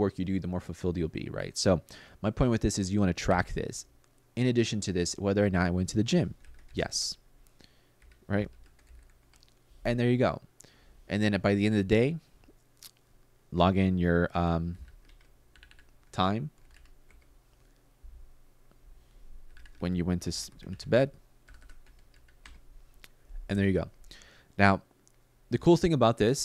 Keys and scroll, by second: 3.0 5, 5.9-7.0 typing, 7.7 Up, 8.0-9.2 typing, 14.2-16.9 typing, 19.0-22.1 typing.